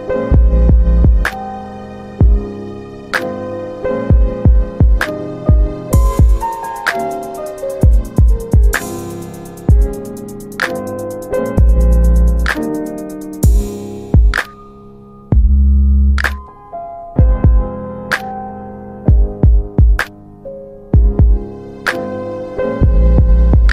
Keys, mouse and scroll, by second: 0.3 click, 1.8 click, 3.6 alt+w, 4.0 alt+w, 4.6 middle click, 5.6 click, 7.3 r, 8.3 click, 10.7 z, 12.8 click, 14.0 alt+click, 15.0 alt+click, 16.8 alt+w, 17.1 alt+w, 18.0 alt+middle click, 19.0 click, 23.2 alt+w.